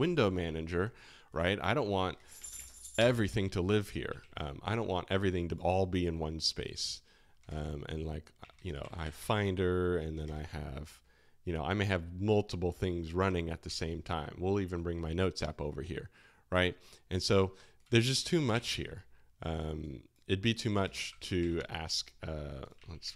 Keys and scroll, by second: 1.5 Escape, 2.1 super+space, 2.2-3.9 typing, 4.1 alt+shift+1, 7.4 super+space, 8.4 Escape, 8.6-9.5 typing, 10.2 super+space, 13.6 Escape, 18.2-19.0 typing, 20.8 super+space, 21.0 typing, 21.3 Escape, 22.8 alt+shift+1.